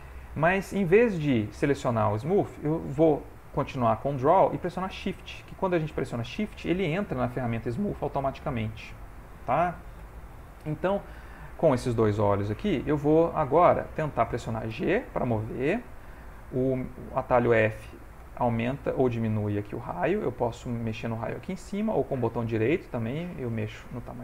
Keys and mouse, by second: 3.8 click, 6.4 shift+click, 10.0 ctrl+z, 12.2 ctrl+middle click, 12.9 middle click, 14.7 g, 15.5 f, 22.1 right click.